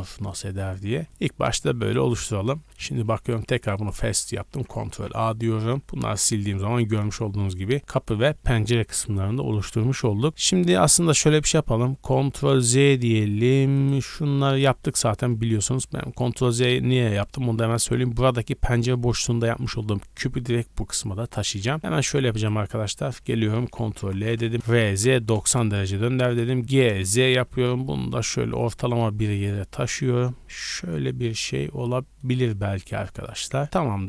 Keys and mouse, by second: 1.0 ctrl+z, 1.5 Tab, 1.8 click, 1.9-2.6 middle drag, 2.6 z, 3.7 click, 4.5 ctrl+a, 4.8 z, 5.3 click, 5.6 x, 6.0-12.6 middle drag, 6.4 a, 6.6 a, 11.2 ctrl+z, 11.6 ctrl+z, 12.0 ctrl+z, 12.6 click, 12.8-13.7 middle drag, 13.7 click, 13.8-17.5 middle drag, 14.5 g, 21.2 click, 21.8 Tab, 22.1 Tab, 22.3 click, 22.6 Tab, 24.0 ctrl+l, 24.5 ctrl+z, 24.5 g, 24.6 r, 26.0 g, 26.9 shift+click, 29.7 middle click, 30.6-34.0 drag, 33.7 Tab.